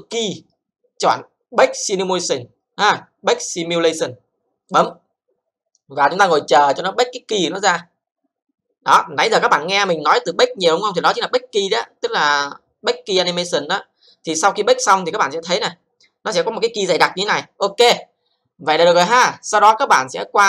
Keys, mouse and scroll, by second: 0.0 click, 4.6 click.